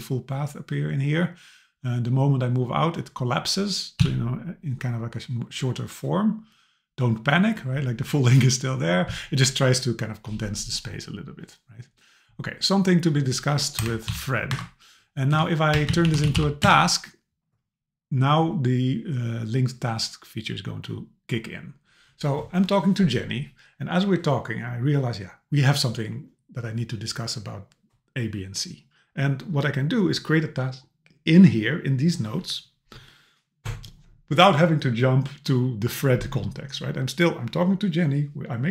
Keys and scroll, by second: 13.8 BackSpace, 14.5 super+Right, 15.3 BackSpace, 16.7 Return.